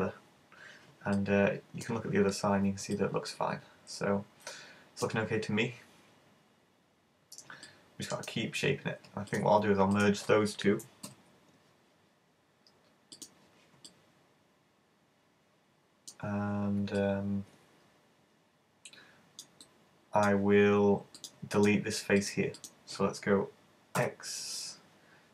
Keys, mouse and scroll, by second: 1.2 middle click, 3.0 middle click, 5.6-6.6 scroll down 7, 6.6-7.5 scroll up 4, 7.5 scroll up 1, 7.7 middle click, 9.3 right click, 9.9 shift+right click, 11.1 alt+m, 13.9 middle click, 17.1 middle click, 19.7 middle click, 21.2 right click, 21.3 shift+right click, 21.6 shift+right click, 22.2 shift+right click, 22.6 shift+right click, 24.0 x.